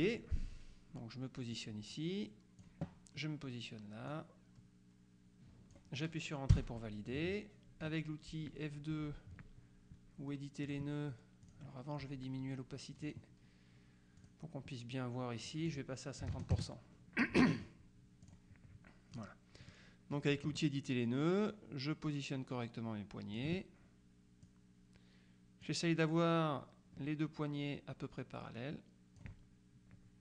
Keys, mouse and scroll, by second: 0.1 click, 1.6-3.2 drag, 4.2-6.3 drag, 6.6 Return, 7.9 F2, 10.8 click, 11.5 click, 13.2 click, 14.3 click, 15.6 click, 16.4 KP_5, 16.6 KP_Enter, 18.3 click, 19.2 click, 20.2 click, 21.6-23.9 drag, 24.5-26.2 drag, 28.7 click.